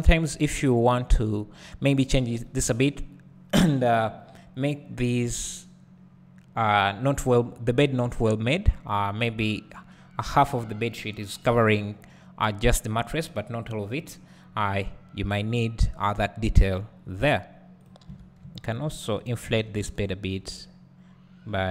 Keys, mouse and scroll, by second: 17.2-18.7 scroll up 1, 20.0 alt+click.